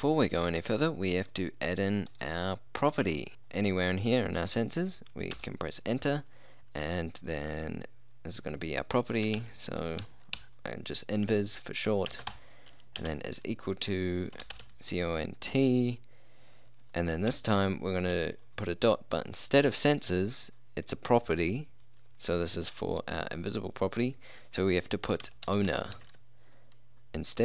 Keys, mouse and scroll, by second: 5.4 Return, 9.3-10.4 typing, 12.2 space, 12.4 =, 13.1 space, 14.4 c, 14.5 o, 14.7 n, 14.7 t, 17.4 ., 25.3-26.1 typing.